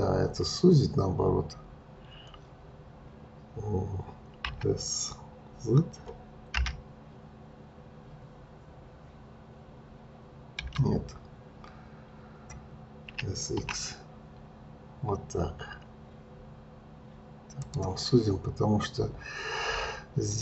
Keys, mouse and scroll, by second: 4.4 s, 13.1 s.